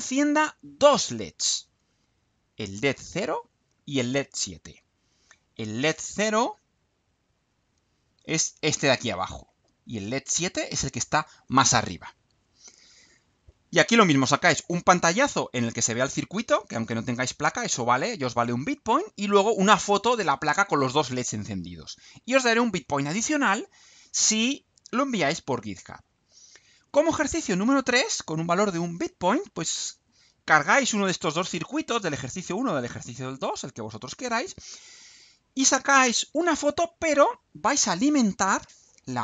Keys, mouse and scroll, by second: 7.3 click.